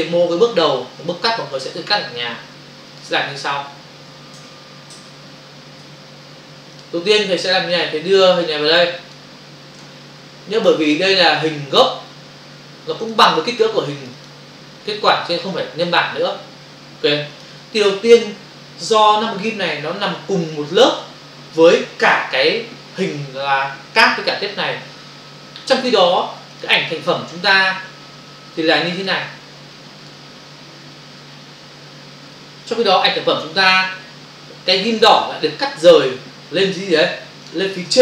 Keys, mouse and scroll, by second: 2.9 click, 4.4 ctrl+alt+w, 4.9 n, 5.2 n, 6.7 click, 6.8 click, 8.5 click, 13.1 click, 13.9 click, 14.3 click, 16.4 Escape, 17.3 click, 19.4 ctrl+space, 22.3 ctrl+o, 26.5 click, 27.8 click, 30.0 click, 35.0 click, 37.4 click.